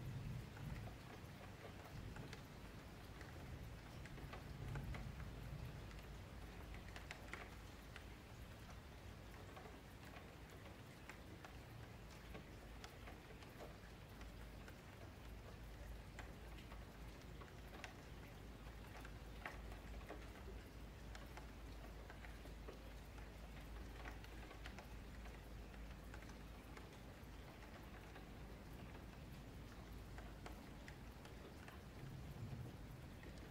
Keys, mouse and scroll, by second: 1.1 e, 4.0 shift+Tab, 4.2 click, 5.5 F3, 5.9-6.9 middle drag, 6.9 click, 8.5-10.2 middle drag, 12.5-15.3 middle drag, 15.3 click, 16.0-16.4 scroll up 3, 16.4-17.6 shift+middle drag, 17.6 click, 20.2 scroll up 3, 20.5-22.0 scroll down 11, 22.0 click, 22.3 click, 23.7 2, 23.9 click, 24.8 click, 25.9 F3, 26.4 click, 26.9 F3, 27.5 click, 29.2 Tab, 30.1 Tab, 30.4-31.9 middle drag, 31.9 Tab, 32.3-33.5 middle drag.